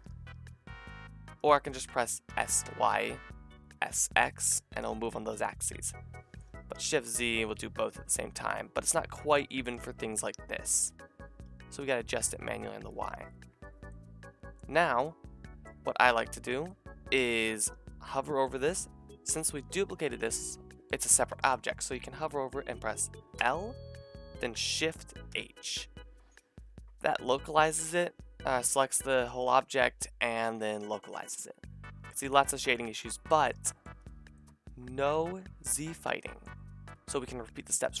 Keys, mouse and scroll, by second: 1.6-6.5 drag, 2.3 s, 6.5 s, 10.7 s, 11.1-17.6 shift+middle drag, 17.6-24.7 drag, 23.4 l, 25.3 shift+h, 28.6 a, 29.2-33.6 middle drag, 33.9-38.0 middle drag.